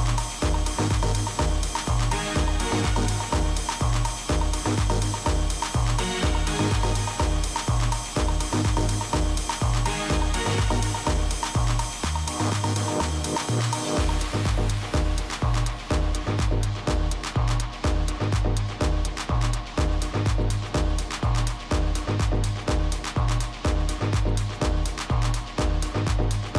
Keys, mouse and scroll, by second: 0.9 KP_3, 1.8-3.9 middle drag, 2.2 z, 3.3 z, 10.7-12.9 middle drag, 17.2 ctrl+z, 18.2 middle click, 19.8 a, 22.0 right click, 22.7-23.8 drag, 25.7-26.5 middle drag.